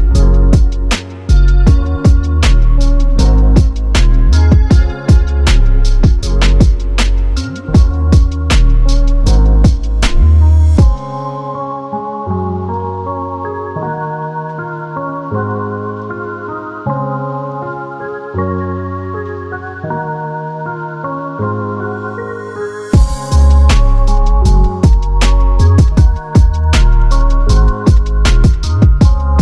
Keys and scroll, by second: 4.7 1, 4.8 Return, 7.0-9.4 typing, 20.4-22.2 Up, 21.5 Return, 22.9 1, 23.1 Return, 25.2-27.3 typing, 29.0 1, 29.2 Return.